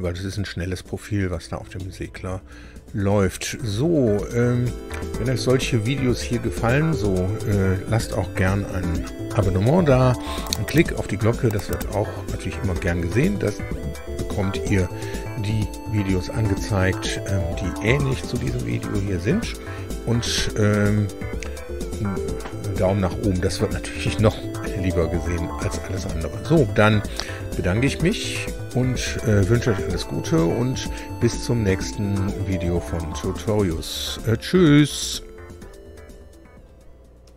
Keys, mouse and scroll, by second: 1.7-5.5 drag.